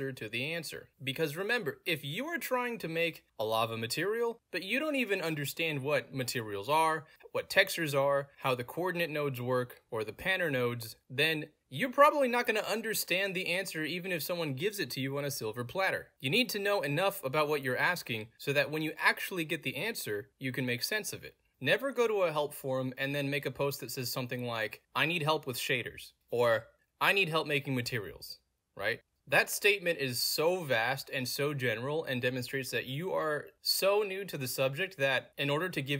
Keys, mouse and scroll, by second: 4.1-4.4 scroll down 2, 5.3-6.9 scroll down 2, 6.9-9.2 middle drag, 6.9-8.1 scroll down 1, 8.1-9.2 scroll down 1, 9.9 middle click, 9.9-10.3 scroll down 2, 11.9 scroll down 2, 14.0 scroll down 2, 16.0 scroll down 2, 16.8 middle click, 16.8-17.9 scroll down 4, 17.4 middle click, 18.6 middle click, 18.6 scroll down 2, 19.6-21.3 middle drag, 19.6-20.7 scroll down 2, 20.7-21.3 scroll down 1, 21.3 click, 22.8 middle click, 22.9-24.2 scroll up 4, 23.0 middle click, 23.3 middle click, 24.5-28.9 typing, 30.0-34.1 middle drag, 30.0-31.8 scroll down 2, 31.8-32.9 scroll down 1, 32.9-33.8 scroll down 1, 33.8-34.4 scroll down 1, 35.1 middle click, 35.1-35.6 scroll down 2.